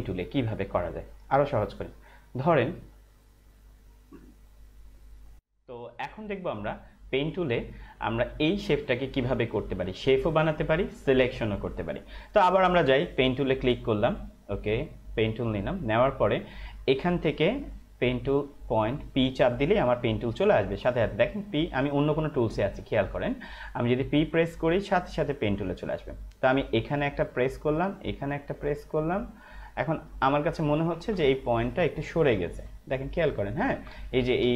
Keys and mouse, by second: 2.3 right click, 4.9 click, 14.5 click, 18.5 click, 20.9 p, 23.2 click, 25.0 p, 27.2 click, 30.5 ctrl+=, 31.2 space, 31.3 click, 31.7 space, 31.8 click, 31.9 space, 33.1 ctrl+=, 34.0 space, 34.1 click.